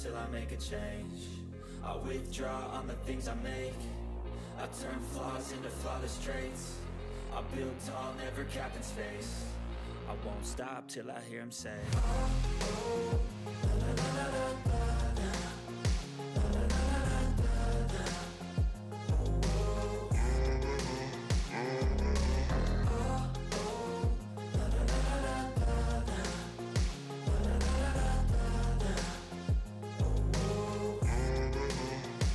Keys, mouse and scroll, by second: 0.5 click, 0.6 click, 2.9 click, 4.8 click, 4.8 click, 6.8 click, 7.5-8.7 scroll up 1, 8.9-10.1 scroll up 1, 10.6 scroll up 1, 10.6 click, 13.4 click, 13.5 click, 14.6-16.2 typing, 17.2-20.8 typing, 21.3 click, 22.0-23.2 typing, 23.7 click, 25.2-27.3 typing, 29.0 click.